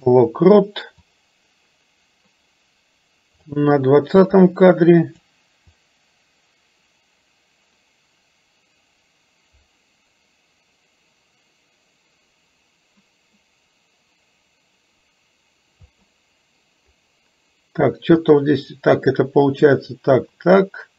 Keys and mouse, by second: 1.1-3.5 drag, 4.5 click, 5.8-15.9 drag, 18.3 click.